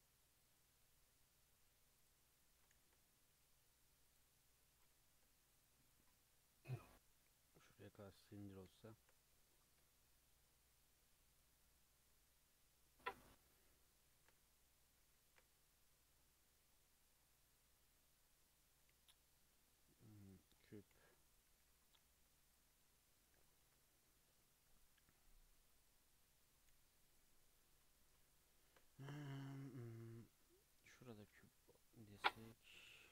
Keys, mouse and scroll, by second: 2.4 click, 2.8 g, 4.6 click, 5.0 g, 5.9 drag, 6.6 click, 7.5 g, 8.0 Tab, 8.8-9.2 shift+middle drag, 9.2-10.0 scroll up 3, 10.0-14.1 shift+middle drag, 14.1 shift+a, 15.1 shift+a, 20.5-21.0 scroll down 1, 21.0 g, 21.5 s, 22.0 g, 22.7 Tab, 23.2 click, 23.7 g, 25.1 drag, 25.7 drag, 26.2 r, 26.7 g, 27.6 Tab, 28.3-28.7 shift+middle drag, 28.7 shift+a, 31.1 g, 31.9 s, 32.7 s.